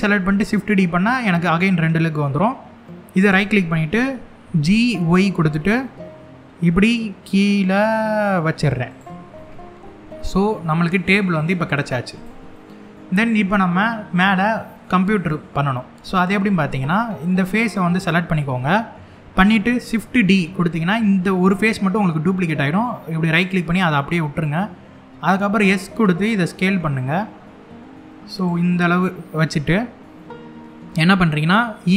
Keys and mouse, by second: 2.8 right click, 4.1 g, 4.6 y, 8.6 click, 9.0-10.0 middle drag, 10.2 middle click, 11.8 click, 12.2 middle click, 14.5 middle click, 15.9 middle click, 17.3 click, 18.2 middle click, 19.5 shift+d, 23.1 right click, 23.6 middle click, 25.2 s, 27.9 click, 29.9 middle click, 31.5 e.